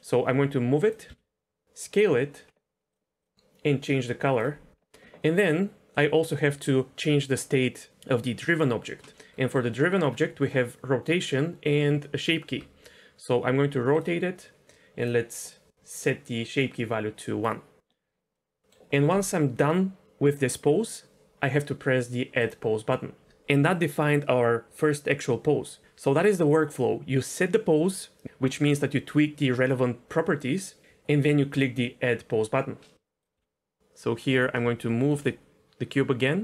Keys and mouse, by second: 0.3 g, 0.8 click, 1.1 s, 2.9 drag, 9.1 middle drag, 9.7 middle click, 12.5 r, 15.0 click, 16.5-17.4 drag, 18.4 middle click, 33.2 click, 33.3 g, 34.3 click, 34.8-35.1 shift+middle drag, 35.9 s.